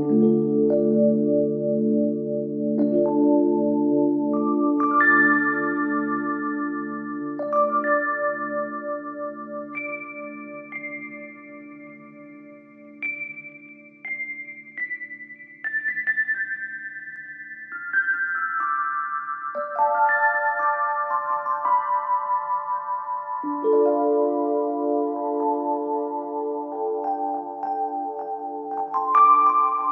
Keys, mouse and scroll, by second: 1.1-2.9 scroll down 11, 2.9-3.4 scroll down 3, 3.7-5.8 drag, 5.8-7.2 scroll down 6, 7.2 click, 10.8-13.8 drag, 16.3 click, 16.7 scroll up 2, 17.0-18.0 scroll down 1, 18.0 click, 18.4-19.4 scroll down 1, 19.8 click, 20.3-20.7 scroll up 1, 20.7 click, 21.0-21.6 scroll up 2, 21.6 shift+middle click, 22.2 Tab, 23.6 2, 24.7 click, 24.9 click, 25.9 click, 27.3 click, 28.4 scroll down 1, 28.6-29.8 middle drag, 29.8 click.